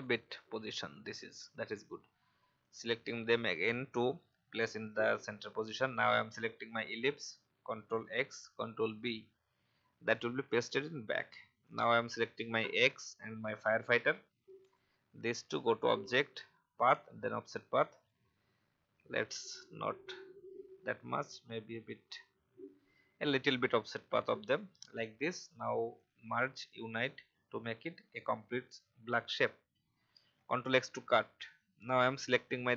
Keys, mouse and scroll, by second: 5.0 alt+scroll up 1, 5.9 click, 10.0 click, 13.0 shift+click, 14.6 click, 19.8-20.2 scroll down 1, 21.3-24.5 scroll up 1, 24.5 click, 28.5-28.9 alt+scroll down 2, 32.1 click.